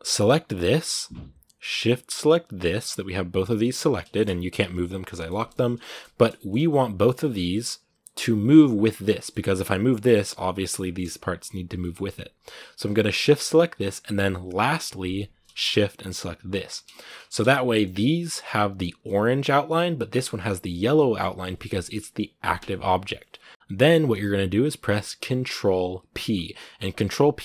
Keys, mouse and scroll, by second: 0.5 right click, 2.8 g, 3.9 shift+middle click, 4.4 g, 4.9 middle click, 5.3-5.6 scroll up 1, 5.6-8.5 shift+middle drag, 8.5 right click, 8.8 scroll down 2, 8.9 middle click, 9.4 r, 10.6-11.6 right drag, 11.6 middle click, 11.7-12.2 scroll up 2, 12.2 right click, 16.3 shift+right click, 16.7 shift+middle click, 16.9-17.5 scroll up 2, 17.5 middle click, 17.7-19.4 scroll up 2, 19.4-20.7 scroll up 1, 20.7-23.5 shift+middle drag, 23.5-27.4 shift+right drag.